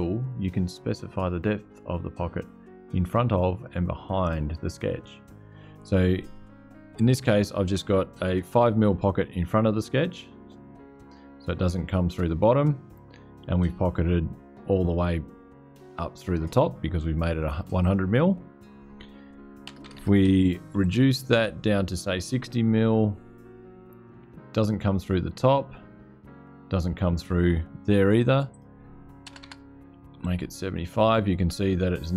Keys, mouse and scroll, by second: 9.1-13.0 middle drag, 17.5 click, 19.4-21.1 typing, 25.0-26.3 drag, 26.3 scroll up 2, 28.2 click, 29.0 BackSpace, 29.7 7, 29.9 5.